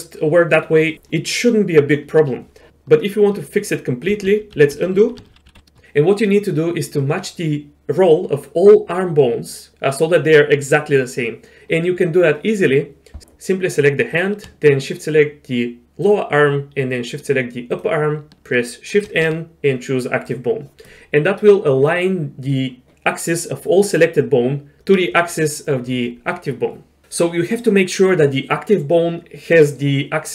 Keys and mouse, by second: 4.1 ctrl+z, 4.3 ctrl+z, 4.6 ctrl+z, 4.8 ctrl+z, 4.9 ctrl+z, 5.1-5.6 ctrl+z, 16.0 shift+click, 17.7 shift+click, 19.0 shift+n.